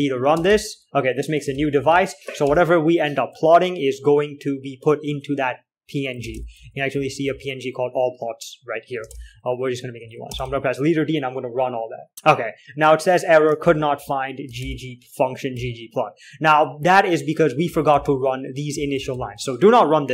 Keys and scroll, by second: 0.0-0.8 typing, 1.9 ctrl+l, 2.1 z, 2.2 z, 2.8 ctrl+h, 6.4-8.1 typing, 9.4 typing, 10.8-11.8 typing, 13.9 ctrl+l, 14.3 typing, 14.9 ctrl+h, 15.7-16.4 typing, 17.7-19.4 typing.